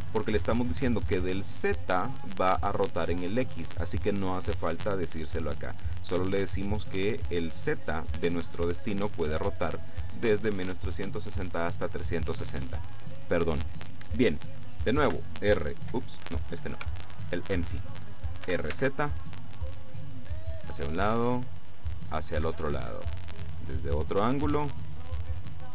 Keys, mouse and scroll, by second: 15.1 r, 16.7 Escape, 17.5 right click, 18.5 r, 18.7 z, 22.5 Escape, 23.3-23.6 scroll down 2, 23.6 click, 25.5 click.